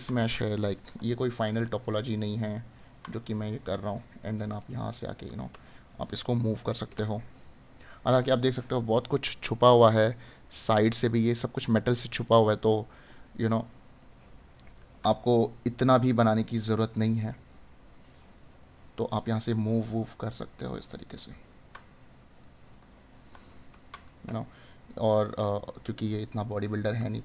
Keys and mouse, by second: 1.2 right click, 14.2 right click, 19.5 right click, 22.4 right click.